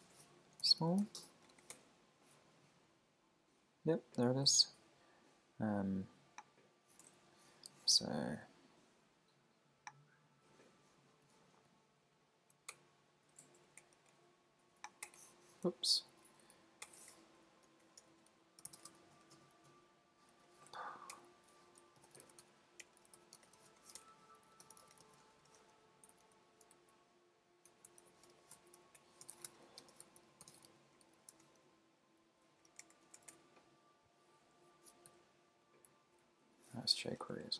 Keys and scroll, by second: 0.0-1.5 typing, 1.7 Return, 7.1 super+Tab, 12.0 super+Down, 12.7 Return, 15.6 super+z, 16.3 super+Right, 16.5 Down, 16.8 Return, 20.7 Right, 21.1 super+BackSpace, 24.0 alt+BackSpace, 25.1-25.9 typing, 26.7 alt+Left, 27.7 alt+Right, 28.6 super+Right, 29.0 Return, 33.0 shift+{, 33.3 Return, 35.1 super+s, 35.9 Up, 36.2 alt+Right, 36.9 alt+Left, 37.4 Down.